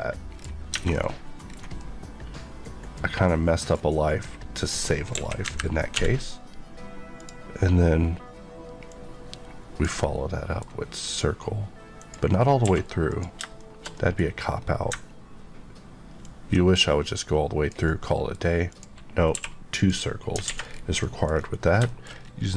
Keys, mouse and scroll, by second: 0.3 scroll down 1, 0.7 Tab, 0.8 scroll down 1, 1.4 scroll down 1, 1.8 middle click, 3.6 scroll down 1, 5.1 KP_1, 5.4 KP_3, 5.9 d, 7.1 click, 10.0 middle click, 12.0 click, 12.6 q, 13.1 click, 13.6 shift+middle click, 14.2 scroll up 1, 14.9-15.4 ctrl+scroll up 1, 16.2 ctrl+click, 17.7 click, 17.8 middle click, 18.7 click, 19.3 q, 19.7 click, 20.4 alt+a, 20.6-21.0 alt+scroll down 2, 21.0 middle click, 21.3 scroll down 1, 21.8 middle click, 22.1 scroll down 1, 22.4 middle click.